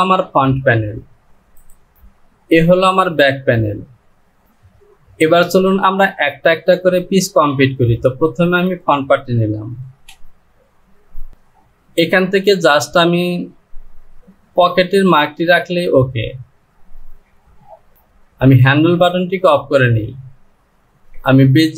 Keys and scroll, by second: 4.4 j, 10.0 Home, 11.8-12.8 typing.